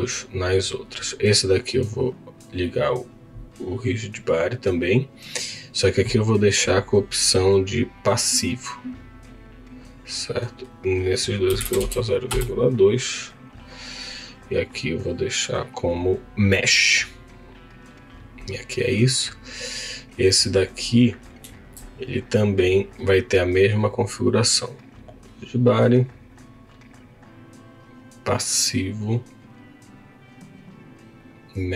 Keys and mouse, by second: 2.5 click, 7.3 click, 10.5-12.4 drag, 14.4-16.3 drag, 19.2 click, 19.8 click, 24.8-27.4 drag, 29.8-31.5 drag.